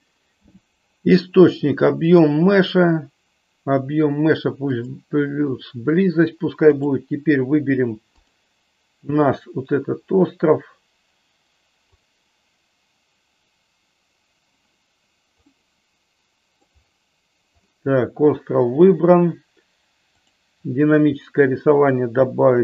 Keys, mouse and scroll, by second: 2.2-4.9 drag, 6.7 click, 8.1 click, 11.9 click, 15.5-16.9 middle drag, 20.1 click, 21.8 click.